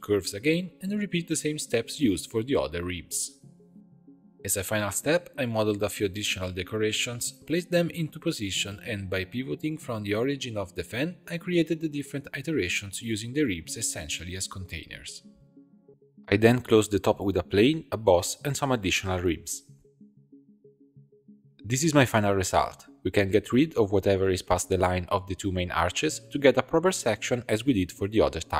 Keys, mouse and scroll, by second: 0.1 click, 0.5 click, 1.1 0, 2.4 click, 2.8-3.6 middle drag, 3.6 right click, 4.6 r, 7.5 g, 9.1 shift+click, 10.1 shift+s, 11.0 shift+d, 11.3 r, 14.1-14.7 scroll down 2, 14.7 shift+d, 15.2 r, 16.1 s, 19.1 shift+d, 19.3 e, 20.6 0, 21.4-28.5 ctrl+middle drag.